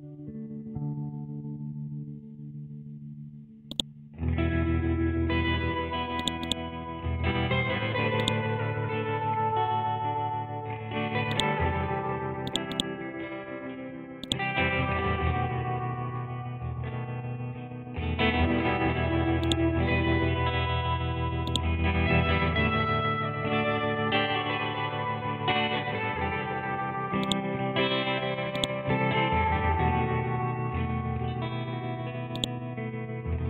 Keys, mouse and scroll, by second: 1.5 scroll up 1, 3.6 right click, 4.2 scroll down 1, 6.2 click, 10.1 shift+Tab, 11.3-17.2 drag, 17.2-19.0 scroll up 1, 19.4-32.3 drag.